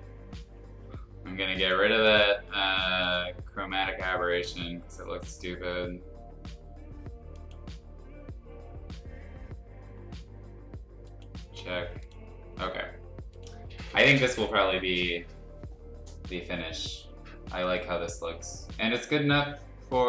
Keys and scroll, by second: 9.3 [.